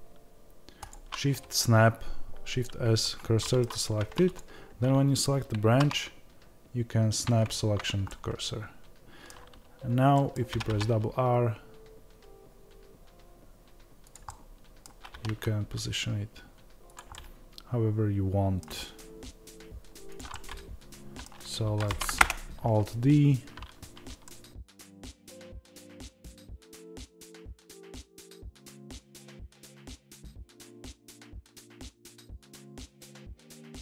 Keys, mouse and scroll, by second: 0.9 shift+s, 3.4-4.4 middle drag, 3.8 Tab, 4.4 click, 7.4 shift+s, 8.0-14.1 middle drag, 10.5 r, 14.1 click, 14.2-20.1 middle drag, 15.1 r, 18.6 r, 20.1 click, 20.3-27.2 middle drag, 21.8 alt+d, 25.1 g, 27.2 click, 27.2 middle click, 28.2 click, 29.3 Tab, 29.6 click, 29.9 shift+s, 30.2 click, 30.7 shift+s, 30.9-33.4 middle drag, 31.2 scroll down 1, 31.2 r, 32.2 r, 33.4 click, 33.4-33.8 middle drag.